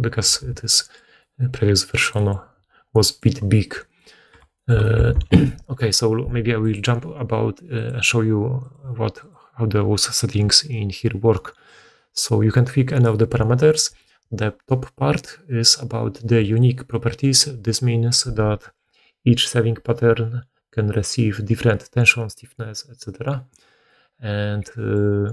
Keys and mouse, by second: 0.3 shift+space, 3.8 right click, 5.0 alt+a, 8.7-9.1 middle drag, 9.1 click, 9.2-25.3 middle drag.